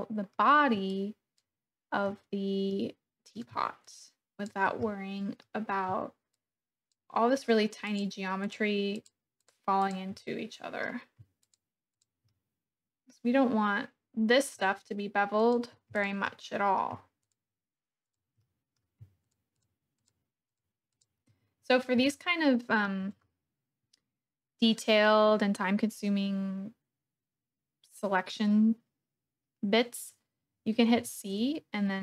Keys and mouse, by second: 1.0 shift+click, 2.7 click, 4.1 shift+click, 4.8 middle click, 6.3 shift+click, 8.4 shift+click, 10.2 middle click, 11.5 shift+click, 12.3-14.4 middle drag, 15.4 shift+click, 16.3 click, 17.3 shift+click, 18.4 click, 19.3 shift+click, 19.9 shift+click, 20.9 shift+click, 22.1 shift+middle click, 22.7 shift+click, 31.0 c.